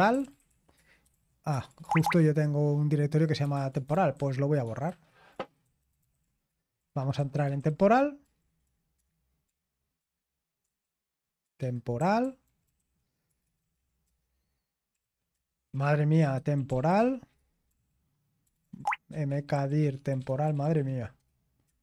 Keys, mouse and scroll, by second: 0.0-1.9 typing, 3.4-21.8 typing.